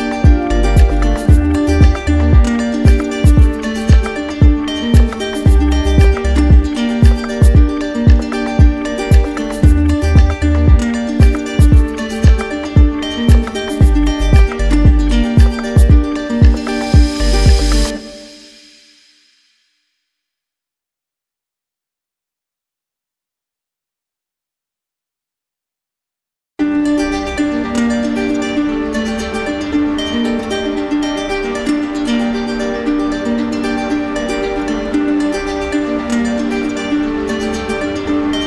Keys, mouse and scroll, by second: 4.3 alt+right click, 4.7 alt+click, 5.3 click, 8.0 z, 11.2-12.5 alt+drag, 11.5 ctrl+z, 12.2 z, 13.3 click, 16.2 click, 20.8 alt+click, 21.9 click, 24.5 alt+click, 25.5 ctrl+z, 27.5 alt+click, 29.0 shift+click, 29.9 shift+click, 30.3 shift+click, 30.9 right click, 31.6 right click, 32.0 shift+click, 32.6 shift+click, 33.0 shift+click, 35.7 shift+click, 35.8 shift+click, 36.2 shift+click, 36.7 shift+click, 37.5 click, 37.8 click.